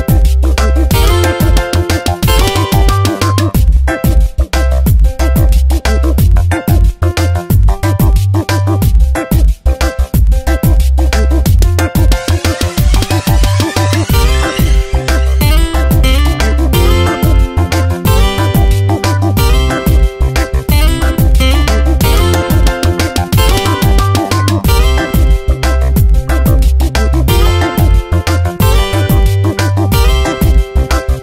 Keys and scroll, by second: 1.2 space, 3.4 space, 5.5 space, 6.2 Tab, 10.2 F9, 24.7 space, 25.5 Tab.